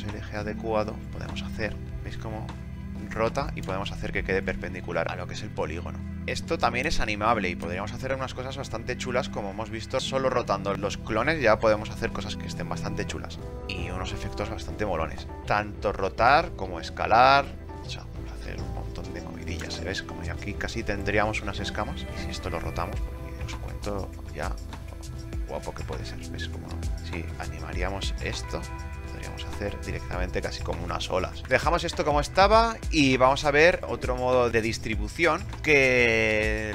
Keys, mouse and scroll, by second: 31.4 KP_0.